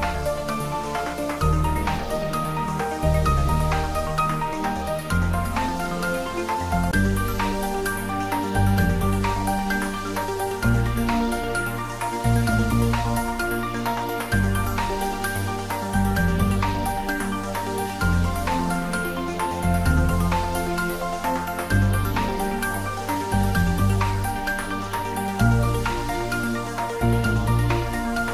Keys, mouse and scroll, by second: 4.3-6.0 scroll down 1, 7.5-8.0 scroll down 1, 8.0 middle click, 9.1 scroll up 1, 11.1 shift+z, 12.0 shift+z, 12.9-14.7 scroll down 1, 15.7-16.6 scroll up 1, 18.4 shift+a, 19.6 click, 20.0-21.6 scroll down 1, 21.7 click, 22.1-22.9 scroll down 1, 22.9 s, 26.5 click, 26.6-28.3 typing.